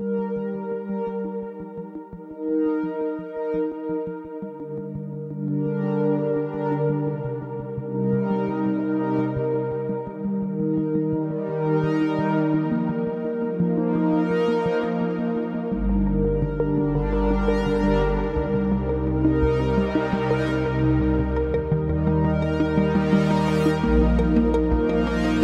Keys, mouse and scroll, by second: 0.9 s, 1.3 y, 3.8 click, 4.5-6.2 middle drag, 6.4 s, 6.7 x, 8.9 click, 9.4-10.1 middle drag, 10.9-11.8 middle drag, 12.5-13.1 shift+middle drag, 13.4-14.0 middle drag, 14.1 Tab, 15.3 3, 15.5 click, 16.6 g, 16.9 z, 17.9 click, 18.3-19.3 middle drag, 19.8 s, 22.4 click, 22.7 middle click.